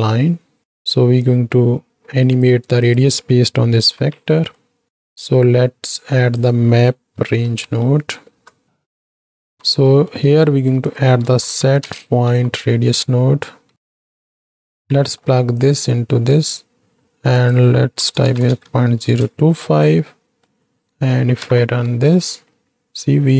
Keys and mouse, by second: 1.3-2.4 drag, 2.9 click, 3.9 ctrl+h, 4.4 middle click, 5.0 middle click, 6.1-9.0 drag, 9.1 middle click, 9.3 click, 9.6 x, 9.9 middle click, 10.5 shift+a, 14.5 click, 15.1 middle click, 15.6-16.3 drag, 17.4-19.1 drag, 20.0 middle click, 21.2 shift+Right, 21.4 shift+Left.